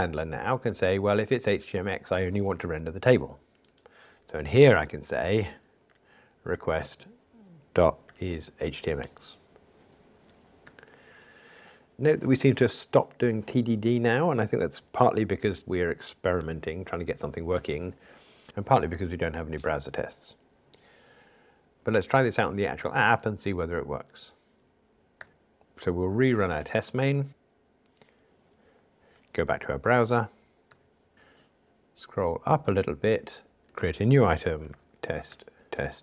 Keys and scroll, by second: 6.9 Return, 26.7 super+r.